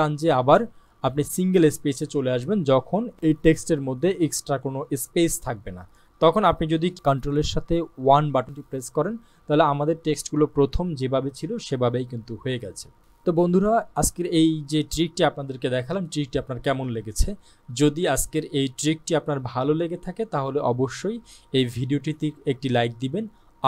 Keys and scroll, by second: 7.6 ctrl+1.